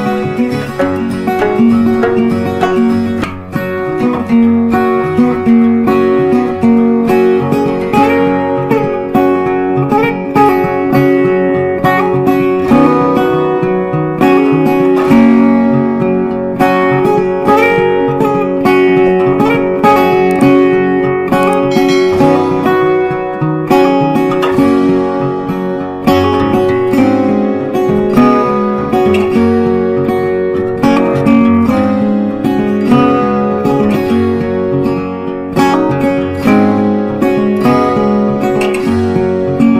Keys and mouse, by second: 2.0 click, 4.7 right click, 5.8-16.2 drag, 17.1 click, 21.9 right click, 23.0-31.4 drag, 31.4-33.1 drag, 35.5-39.7 drag.